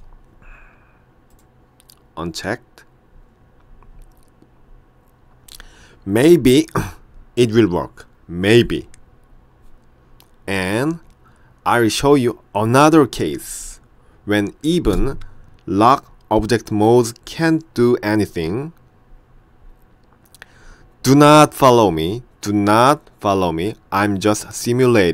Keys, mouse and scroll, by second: 1.4 click.